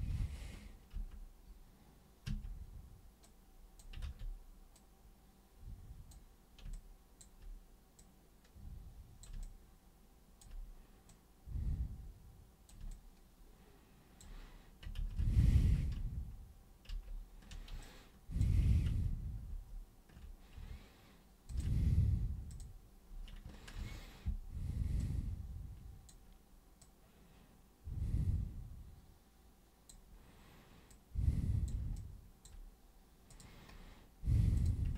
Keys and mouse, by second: 0.9 ctrl+super+e, 2.2 super+w, 3.2-3.8 super+drag, 4.0 ctrl+super+z, 4.8-6.1 super+drag, 6.7-7.2 alt+super+drag, 8.0-9.2 super+drag, 9.4-10.4 alt+super+drag, 11.1 super+click, 12.9-14.1 alt+super+drag, 15.0 ctrl+super+z, 15.2 ctrl+super+z, 15.4 ctrl+super+z, 15.8 ctrl+super+z, 16.8 ctrl+super+z, 17.8-18.3 alt+super+drag, 18.9 ctrl+super+z, 19.5 ctrl+super+z, 21.5 ctrl+shift+super+click, 22.5 super+click, 23.7 ctrl+super+e, 25.0-26.1 super+drag, 26.8-29.9 super+drag, 30.9 super+click, 31.9 alt+super+click, 33.3 super+click, 34.5 super+click.